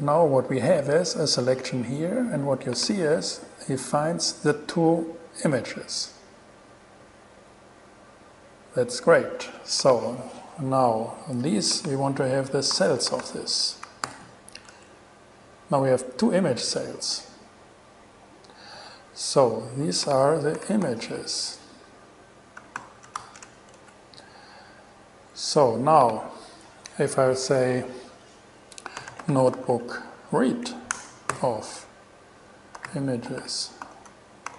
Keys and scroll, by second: 12.7-13.8 typing, 14.3 alt+g, 14.9 alt+shift+g, 14.9 alt+shift+Return, 20.5-21.5 typing, 22.6-24.0 typing, 29.0-30.4 typing, 30.7 Down, 31.1 Return, 31.5 alt+g, 32.7-34.5 typing.